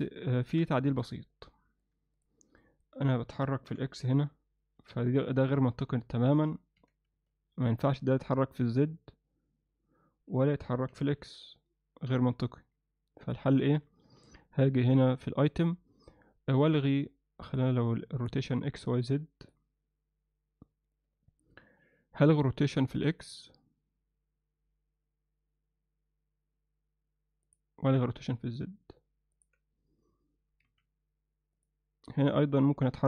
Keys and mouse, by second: 0.4 ctrl+alt+middle click, 0.8 z, 1.2-1.8 middle drag, 2.6 alt+middle click, 3.7 r, 5.4 z, 6.8 r, 10.9 r, 14.2 n, 15.5 click, 17.5-19.5 drag, 27.5 click, 29.4 click, 30.7 z, 32.1 z.